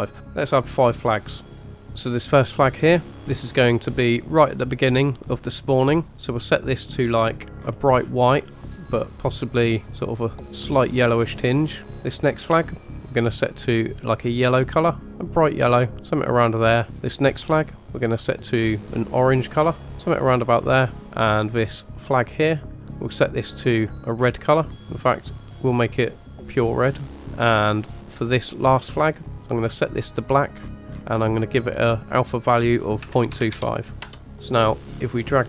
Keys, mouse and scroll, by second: 1.5 drag, 1.9 click, 6.4 click, 12.4 click, 13.5 click, 17.0 click, 17.7-18.3 drag, 22.0 click, 22.9 click, 28.6 click, 29.4 click, 34.7-35.4 drag.